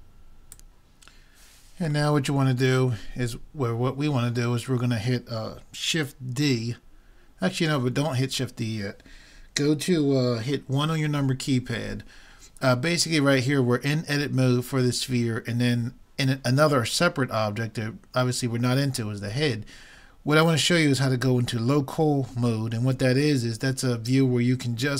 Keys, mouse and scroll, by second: 2.3 middle click, 11.2 KP_1.